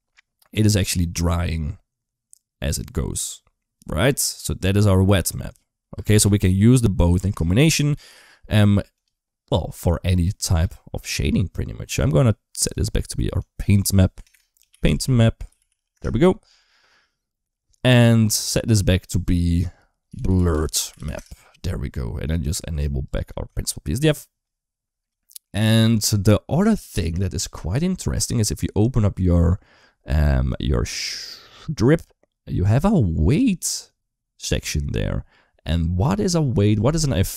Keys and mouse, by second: 7.0 space, 7.8 click, 10.3 click, 11.0 middle click, 12.6-15.8 drag, 14.1 BackSpace, 18.5-21.0 drag, 20.3 r, 21.9 middle click, 22.8 ctrl+shift+click, 23.4 shift+middle click, 25.0 shift+middle click, 31.5 click, 33.5 right click, 34.2 click.